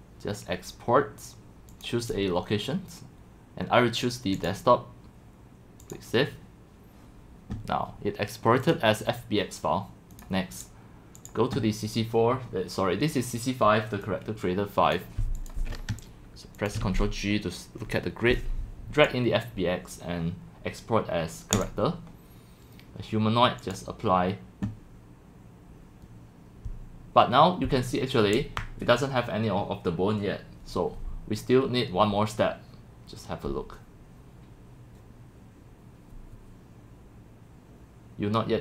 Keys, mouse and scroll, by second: 1.0 click, 2.8-3.8 drag, 4.3 click, 11.6-13.0 drag, 15.5 click, 16.6 click, 16.9 ctrl+g, 18.4-18.8 drag, 19.1-29.0 drag.